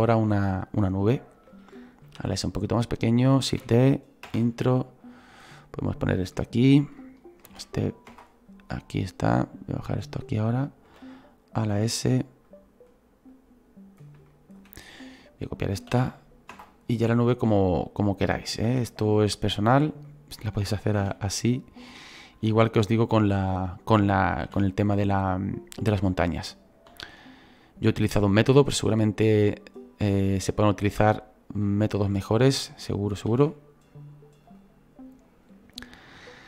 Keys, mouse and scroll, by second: 2.1 s, 3.5 shift+d, 4.8-7.5 drag, 7.5 shift+d, 8.6-10.9 drag, 10.9 s, 12.5-14.9 drag, 14.9-15.9 right drag, 15.9 shift+d, 17.2-18.7 drag, 18.7 s, 19.5-21.0 drag, 21.0 shift+d, 22.5 shift+d, 26.9 s, 28.7-33.3 drag, 33.3 shift+d.